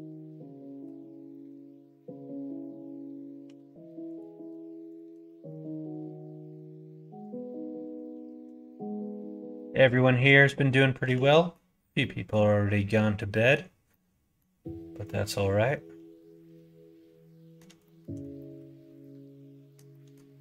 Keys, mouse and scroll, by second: 3.4 2, 4.0 click, 5.2 middle click, 5.8 f, 5.9 middle click, 7.4 middle click, 8.5 middle click, 10.1 shift+click, 11.0 f, 11.2 middle click, 11.9 middle click, 12.7 middle click, 13.3 middle click, 13.8 middle click, 15.0-17.5 middle drag, 17.8 shift+middle click, 18.3-19.7 middle drag, 19.8 middle click.